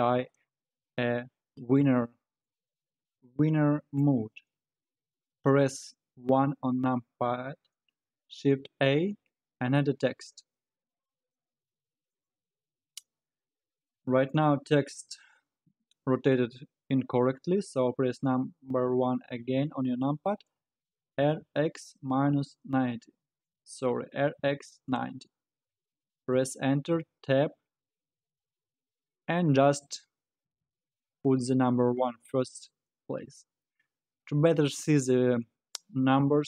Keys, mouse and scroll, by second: 2.4-5.6 middle drag, 6.3 KP_1, 8.4 shift+a, 13.9-16.9 middle drag, 18.3 KP_1, 19.4-20.1 scroll up 1, 20.1 scroll down 1, 21.1 r, 24.1 r, 26.9 Tab, 28.0 BackSpace, 28.2 BackSpace, 28.4 BackSpace, 28.6 BackSpace, 30.5 1, 33.2 Tab.